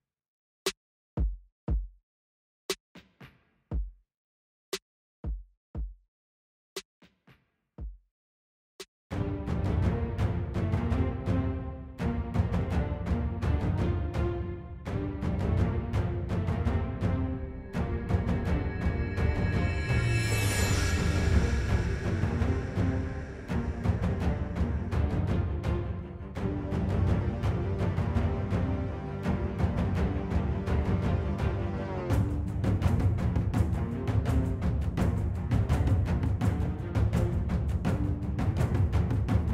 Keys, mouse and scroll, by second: 22.2 middle click, 29.1 middle click, 30.5 middle click, 33.5 middle click, 38.7 middle click.